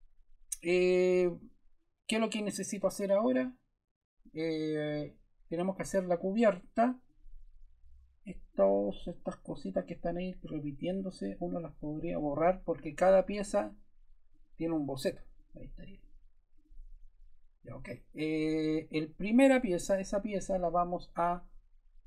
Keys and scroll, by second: 7.9 BackSpace.